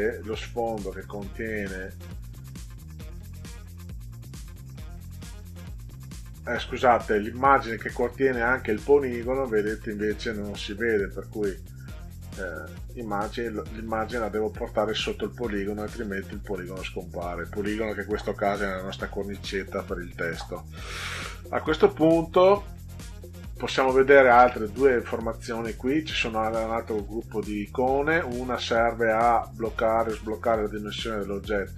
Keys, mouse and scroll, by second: 8.6 click, 9.9 click, 13.0 click, 13.6 click, 14.1 click.